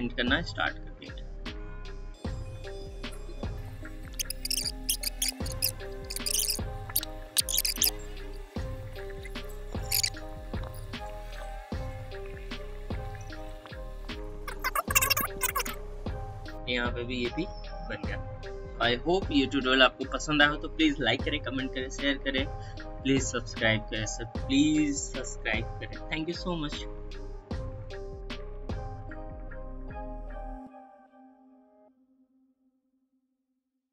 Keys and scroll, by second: 4.5 space, 4.8 space, 7.7-10.0 typing, 11.1-14.1 typing, 15.4 ctrl+i, 16.1 space, 16.4 ctrl+0.